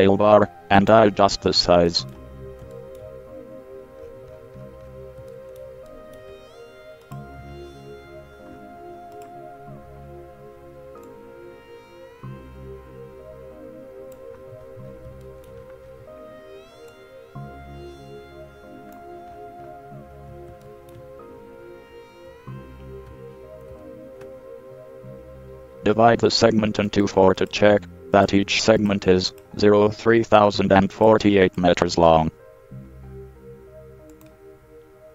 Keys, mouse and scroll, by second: 2.0 middle click, 2.5 middle click, 7.2 middle click, 12.7 click, 14.5-14.8 middle drag, 17.1-19.1 drag, 19.5-20.0 middle drag, 20.9-23.4 middle drag, 23.9 ctrl+r.